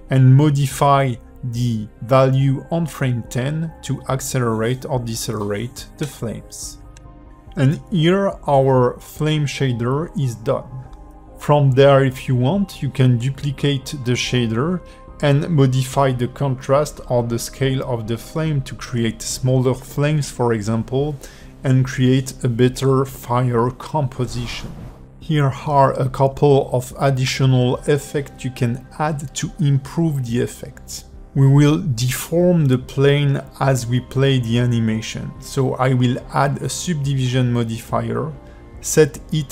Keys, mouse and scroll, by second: 0.2 space, 1.5 g, 6.4-6.7 scroll down 3, 7.0 shift+middle click, 7.9 scroll down 2, 8.3 shift+middle click, 9.5-9.9 scroll up 2, 10.0 shift+middle click, 10.4-10.9 scroll up 2, 10.9 click, 11.3 click, 11.5 space, 11.7 click, 12.1 click, 12.3 click, 12.7 shift+middle click, 13.0 scroll up 4, 13.2 click, 13.9 shift+middle click, 14.1 click, 14.1 scroll up 1, 15.2 alt+middle click, 15.5 click, 16.3 click, 16.3-24.3 typing, 16.5 scroll up 3, 16.6 middle click, 18.0 click, 18.4 click, 18.6 scroll up 2, 18.7 shift+click, 19.1 click, 19.2 click, 20.0 click, 20.1 scroll down 3, 21.2 click, 21.6 click, 21.9 click, 22.3 click, 22.8 click, 22.9 click, 23.7 click, 23.8 scroll down 3, 23.9 scroll up 4, 24.1 shift+middle click, 24.4 shift+middle click, 26.1 click, 27.8 click, 29.3 click, 30.5 click, 35.2 click, 36.1 click, 36.3 click, 36.5 click, 37.1 click, 37.3 click, 37.5 click, 39.3 click.